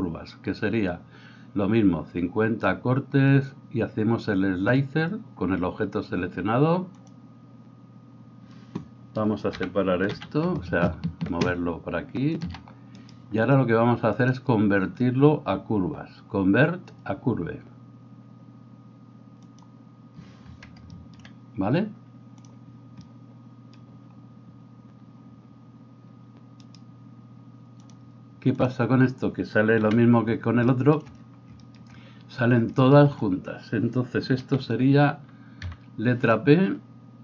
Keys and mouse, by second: 7.1-12.5 drag, 9.5 g, 12.9 right click, 14.1-37.2 drag, 26.6-28.7 middle drag, 26.6-28.7 right drag, 29.8 KP_1, 35.7 p.